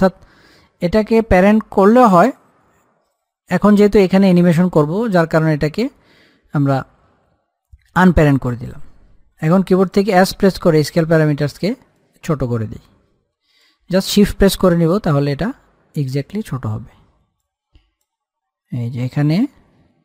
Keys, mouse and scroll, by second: 10.0 click, 10.4 s, 12.3-16.7 drag, 16.7-17.5 scroll up 1, 17.5 click, 17.7-20.0 drag.